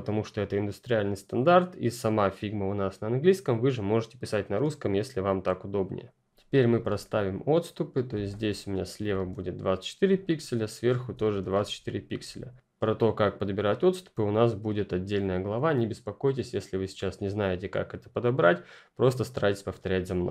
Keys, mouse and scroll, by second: 7.2 click, 10.9 alt+Left, 11.3 alt+Up.